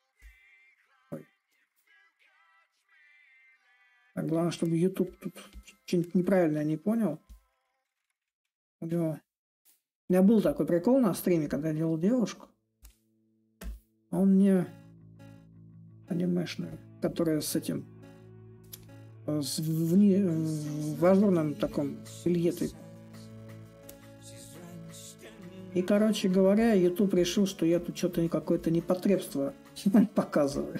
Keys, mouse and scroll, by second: 0.0-2.9 drag, 2.9 s, 4.4-9.4 drag, 10.2-14.8 drag, 14.8 s, 16.4-21.4 drag, 22.4-27.4 drag, 27.9-30.7 drag.